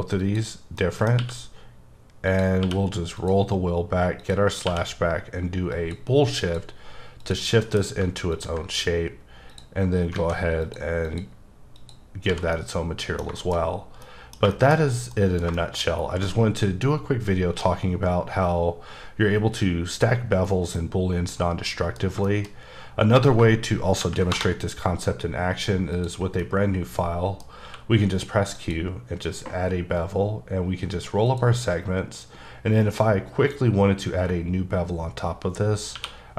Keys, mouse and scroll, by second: 0.2 click, 0.8 middle click, 2.3 click, 2.7 q, 3.2 click, 3.8 scroll down 1, 4.2 click, 4.6 q, 5.7 click, 6.4 click, 7.2 click, 7.6 alt+m, 8.3 ctrl+click, 8.8-9.5 scroll up 2, 9.5 click, 9.9 scroll down 3, 10.1 alt+a, 10.6 click, 11.1 click, 11.8 click, 12.3 h, 12.5 middle click, 13.4 double middle click, 13.7-14.0 scroll up 2, 14.0 middle click, 14.5 shift+middle click, 14.8 scroll down 2, 15.1 middle click, 20.8 middle click, 24.0 ctrl+n, 24.3 Return, 25.9 click, 26.4 middle click, 27.6 q, 28.6 click, 29.5-31.3 scroll up 9, 31.3 click, 35.9 q.